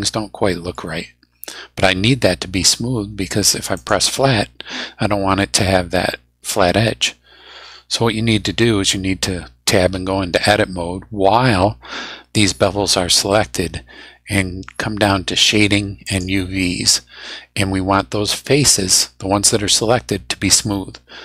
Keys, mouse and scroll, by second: 1.1 scroll up 2, 3.7 click, 9.9 Tab, 16.0 click.